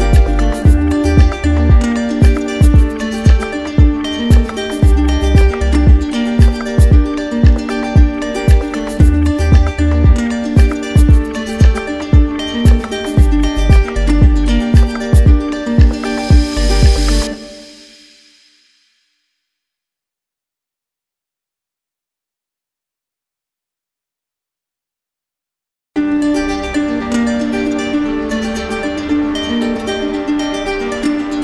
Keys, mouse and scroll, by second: 3.3 alt+click, 5.2 click, 6.9 click, 7.4 shift+click, 10.5 click, 11.2 alt+click, 14.2 alt+click, 14.8 alt+click, 17.5 click, 17.7 shift+click, 18.8 alt+click, 30.7-31.4 drag.